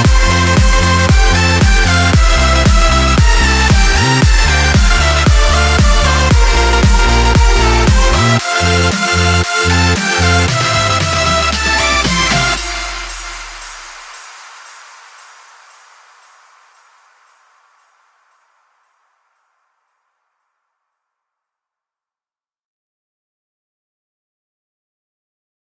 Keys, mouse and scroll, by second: 2.8 click, 3.2 click, 13.3 click, 15.1 click, 23.7 click.